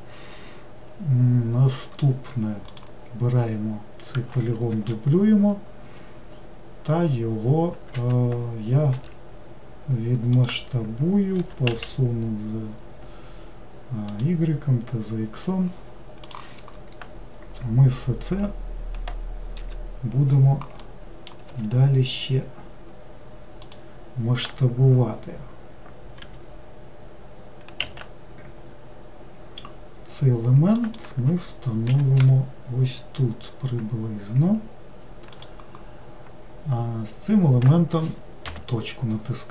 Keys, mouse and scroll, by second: 2.7 click, 4.7 shift+d, 8.9 s, 11.4 g, 20.8 middle click, 21.5 s, 26.2 g, 31.9 g, 36.7-37.4 scroll up 1, 37.4-38.1 scroll up 1, 38.1-38.4 scroll up 1, 38.4 KP_Decimal.